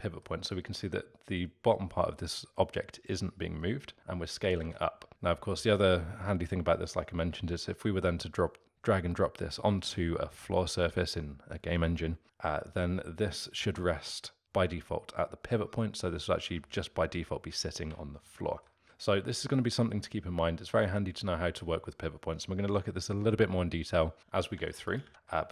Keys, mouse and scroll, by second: 3.6-4.6 middle drag, 4.6 ctrl+z, 18.1-18.8 alt+middle drag, 18.8 Tab, 24.2 s, 25.0 ctrl+z, 25.1 Tab, 25.3-25.5 alt+middle drag.